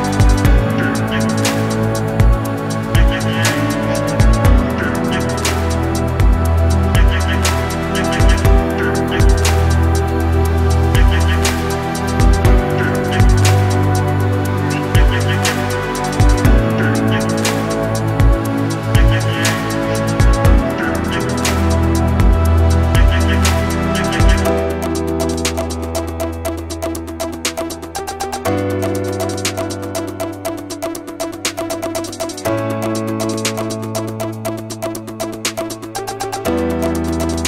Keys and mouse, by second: 2.0 shift+click, 2.4 shift+d, 4.1 ctrl+z, 4.3 ctrl+z, 4.8 shift+click, 6.9 z, 7.1 click, 7.7 z, 7.8-9.0 drag, 9.4 KP_3, 12.0 c, 14.1 click, 14.7 shift+click, 15.3 shift+click, 15.7 c, 17.3 z, 17.7 KP_3, 18.4 shift+click, 19.1 shift+d, 20.1-21.6 drag, 21.8 shift+click, 22.7 shift+click, 22.9 1, 23.5 s, 24.6 shift+click, 25.2 a, 25.8 shift+click, 27.4-28.7 shift+drag, 30.3 f, 30.4 a, 31.9 f, 32.1 f, 32.2 f, 32.7 f, 33.1 shift+click, 34.0 f, 34.2 f, 34.4 f, 34.9 shift+click, 35.6 shift+click.